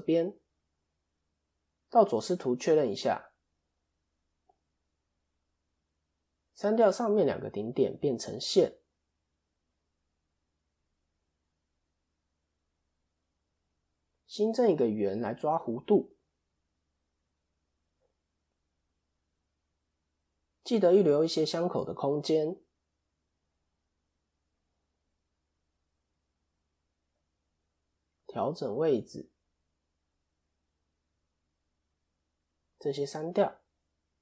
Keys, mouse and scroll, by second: 1.6 ctrl+KP_3, 3.9 KP_7, 4.7 scroll down 1, 5.6 click, 5.6-5.9 scroll down 2, 5.9 shift+middle click, 6.8 click, 8.6 x, 9.4-9.9 scroll up 4, 10.1 shift+middle click, 12.0-12.6 scroll down 1, 13.6 shift+a, 16.4 click, 18.3 s, 22.5 click, 25.5 shift+middle click, 26.5-28.3 scroll down 1, 28.3 click, 28.3 scroll down 1, 32.5 ctrl+click, 33.2 x.